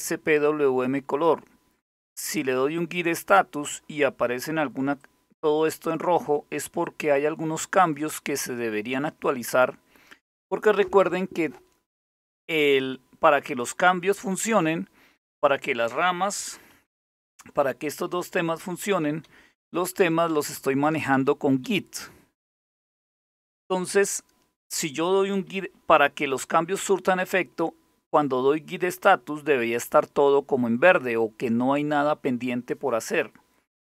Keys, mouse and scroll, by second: 4.6 click, 6.4-8.2 drag, 16.4 alt+super+t, 18.1 Down, 18.4 Up, 18.9 Down, 19.2 Up, 19.6 Down, 19.9 Up, 20.2 Down, 20.4 Up, 20.8 Down, 21.2 Up, 22.5 Escape.